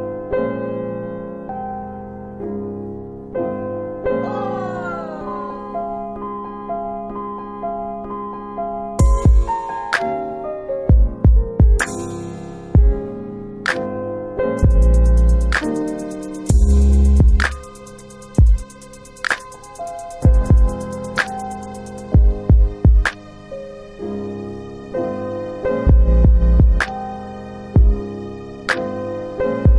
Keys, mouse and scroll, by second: 1.3 alt+click, 4.3 alt+click, 5.3 click, 6.3 click, 7.0 alt+click, 7.3 alt+click, 7.8 alt+right click, 7.8 alt+right click, 8.4 alt+right click, 9.0 alt+click, 10.8 alt+click, 12.6 alt+click, 17.2 alt+click, 18.3 alt+click, 19.0 alt+right click, 20.1 alt+click, 20.6 alt+click, 22.0 alt+click, 22.5 alt+click, 23.6 alt+right click, 27.6 alt+middle click, 28.7 alt+right click, 29.2 alt+right click.